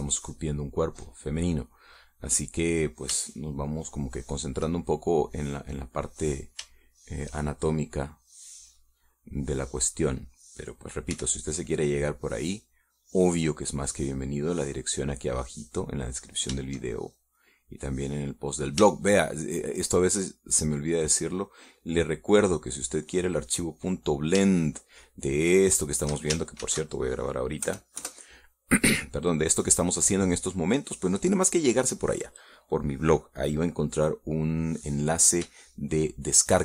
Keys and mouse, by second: 0.3 middle click, 2.2-3.3 drag, 3.4 click, 3.8-6.1 middle drag, 8.3 shift+middle click, 12.5 f, 13.0 click, 15.2-17.5 drag, 18.8-20.1 drag, 20.3 shift+middle click, 22.3-25.7 drag, 25.9-27.5 shift+middle drag, 28.1 ctrl+shift+s, 29.1 KP_Add, 29.5 KP_Enter.